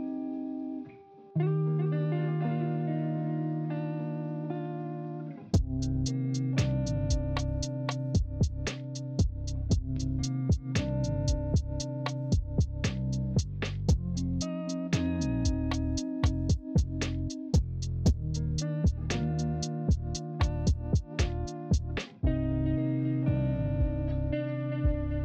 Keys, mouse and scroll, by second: 3.0 ctrl+z, 5.8 ctrl+c, 6.6 ctrl+f, 17.7 ctrl+z, 18.9 ctrl+z.